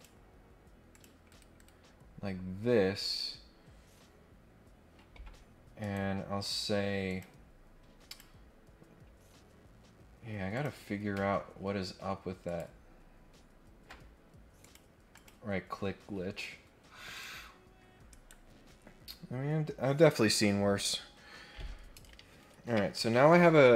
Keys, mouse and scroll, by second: 0.9 click, 1.2 Escape, 1.5 Escape, 1.9 scroll down 2, 2.3-2.9 scroll up 4, 5.8 right click, 7.1 click, 8.0 click, 10.5 click, 12.4 ctrl+click, 14.6 click, 15.1 click, 15.6 scroll down 2, 16.1-16.8 scroll up 6, 17.1 click, 18.1 right click, 18.6 scroll down 2, 19.2-20.3 scroll up 4.